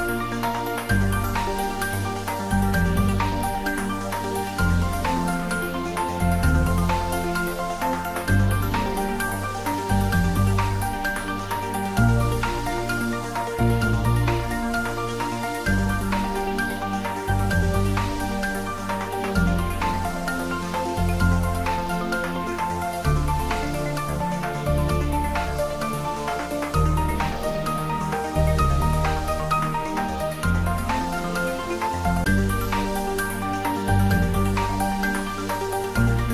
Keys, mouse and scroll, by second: 0.2-9.4 drag, 10.0-14.2 drag, 14.2-16.1 scroll down 1, 16.7 Tab, 18.2-18.6 scroll down 1, 20.0-24.0 middle drag, 27.3 middle click, 27.3 click, 33.7 click, 33.9 ctrl+s.